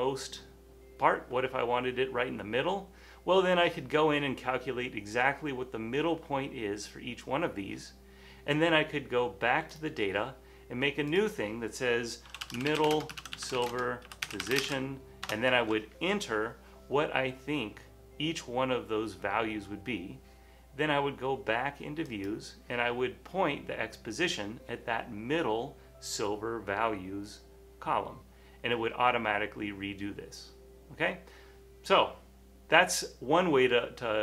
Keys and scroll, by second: 12.2-14.9 typing, 18.4 typing.